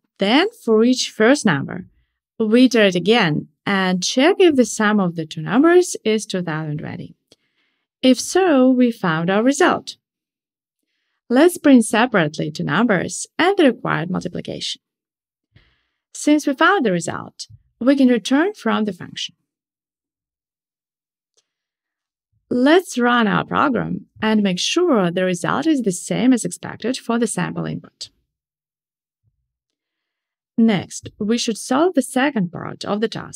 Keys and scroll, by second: 1.2 Tab, 11.8 Tab, 15.6 shift+super+Return, 16.8 Tab, 18.8 shift+super+Return, 21.4 ctrl+shift+r.